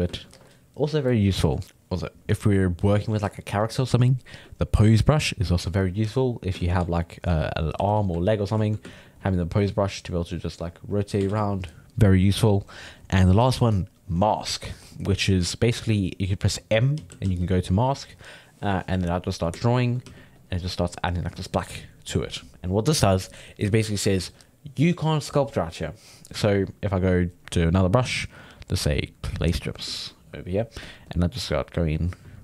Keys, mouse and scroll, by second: 0.2 ctrl+z, 1.6-4.9 middle drag, 4.9-6.6 drag, 6.6 ctrl+z, 6.9 ctrl+middle click, 7.8 f, 8.2-9.8 ctrl+middle drag, 9.8-11.3 drag, 11.3 ctrl+z, 14.7 m, 16.9 m, 17.2 m, 19.6 ctrl+shift+middle click, 20.0 f, 20.4-23.4 drag, 28.3-29.4 middle drag, 29.4 click, 30.0 shift+middle click, 30.8-32.4 drag.